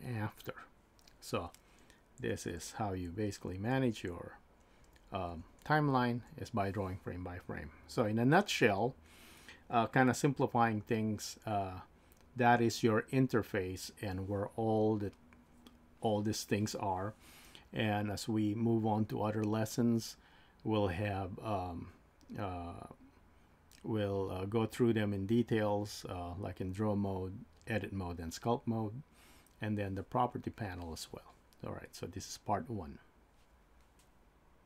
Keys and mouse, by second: 2.2 Left, 3.2 Left, 3.8 Left, 4.8 Up, 5.3 Up, 5.9 Down, 6.2 Down.